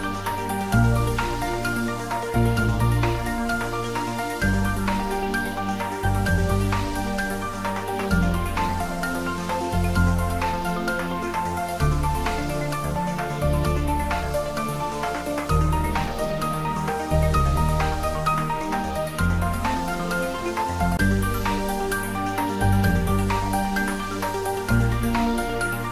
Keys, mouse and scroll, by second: 0.2 shift+z, 0.9-1.5 scroll down 1, 1.5-1.9 scroll up 1, 1.9-3.7 middle drag, 3.7 g, 4.1 y, 5.0 x, 6.8 click, 9.3 click, 10.0-10.6 scroll up 1, 10.6 scroll down 1, 12.3 g, 12.7 y, 13.7 Right, 16.4 click, 17.8-18.6 scroll down 1, 18.4-19.3 typing, 19.8 Left, 21.8 click, 22.3 scroll down 1, 23.8 scroll up 1.